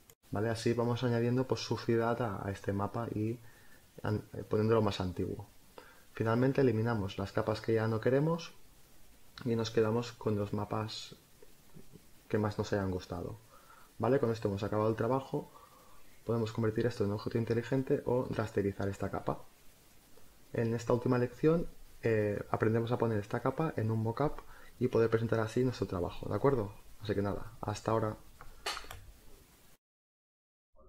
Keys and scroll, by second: 3.3 space, 6.9 space, 8.0 Delete, 10.2 Delete.